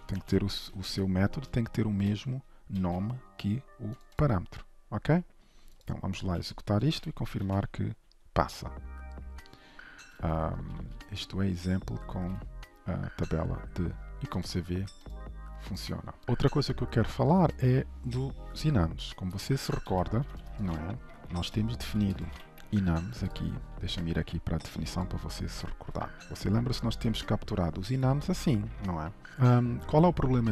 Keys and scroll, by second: 1.0 ctrl+shift+Left, 2.1 ctrl+c, 2.8 ctrl+s, 7.0 alt+shift+F10, 16.2 ctrl+shift+F12, 22.3 ctrl+/, 22.7 ctrl+s, 25.0 ctrl+b, 29.3 ctrl+s.